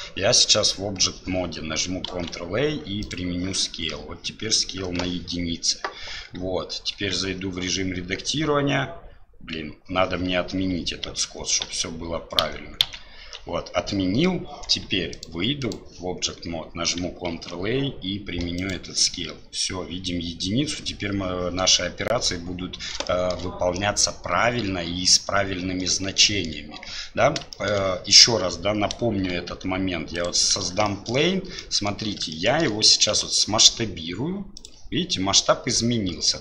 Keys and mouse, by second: 2.1 ctrl+a, 7.0 Tab, 11.1 ctrl+z, 17.3 ctrl+a, 23.1 shift+middle drag, 26.2 shift+middle drag, 27.5 shift+middle drag, 27.6 shift+click, 29.3 shift+a, 30.9 shift+drag, 31.7 click, 32.4 shift+click.